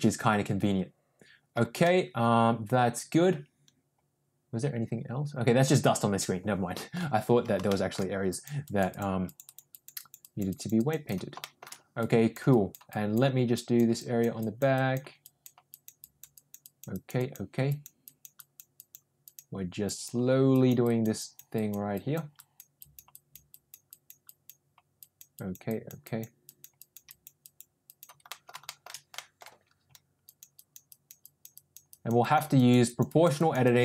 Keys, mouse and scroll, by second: 1.8-6.9 middle drag, 7.6 shift+middle click, 8.2 click, 8.6 click, 8.8 click, 9.2 click, 9.6 click, 9.9 click, 10.1 click, 10.4 click, 10.7 click, 11.0 click, 11.3 shift+middle click, 11.9 click, 12.4 click, 12.8 click, 13.5 click, 13.9 click, 14.3 click, 14.7 click, 15.2 click, 15.6 click, 16.0 click, 16.3 click, 16.6 click, 16.9 click, 17.1 click, 17.6 click, 18.0 click, 18.3 click, 18.7 click, 19.2 click, 19.8 click, 20.4 click, 20.8 click, 21.1 click, 21.5 click, 21.9 click, 22.3 click, 22.7 click, 23.1 click, 23.4 click, 23.8 click, 24.2 click, 24.9 click, 25.3 click, 25.6 click, 26.0 click, 26.4 click, 26.7 click, 27.0 click, 27.4 click, 27.8 click, 28.2 middle click, 28.6 shift+middle click, 29.1 middle click, 30.2 click, 30.5 click, 30.8 click, 31.2 click, 31.5 click, 31.9 click, 32.2 click, 32.5 click, 32.8 click, 33.3 click, 33.6 click.